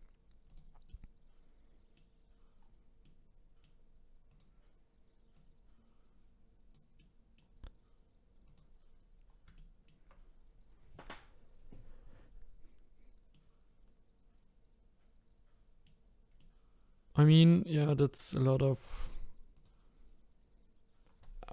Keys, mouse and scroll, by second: 0.5 click, 0.9-2.4 middle drag, 2.4-3.0 scroll down 1, 3.0-4.3 middle drag, 4.3 click, 5.3 click, 7.0-8.5 middle drag, 8.5 click, 9.0-9.6 scroll down 3, 9.6-12.7 shift+middle drag, 13.3-19.5 middle drag, 19.5 click, 20.1-21.0 scroll up 3, 21.0 scroll down 2.